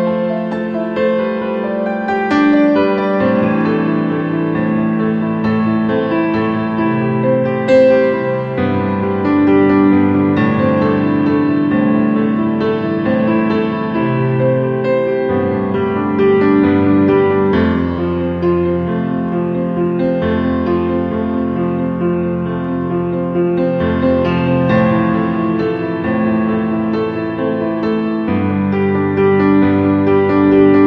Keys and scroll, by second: 28.3 5, 28.9 0.